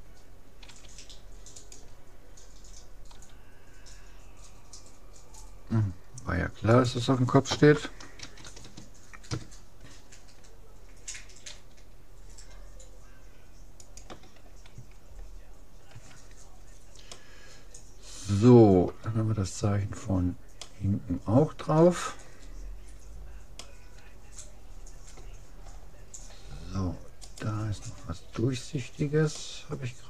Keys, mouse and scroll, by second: 0.7 s, 3.2 g, 7.7 r, 11.6 g, 15.9 a, 16.4 middle click, 17.2-18.0 scroll down 1, 18.0 middle click, 20.6-22.4 middle drag, 23.2-23.6 scroll up 1, 23.6-25.2 middle drag, 25.8-27.2 scroll up 1, 27.2-28.8 right drag, 29.4-30.0 middle drag.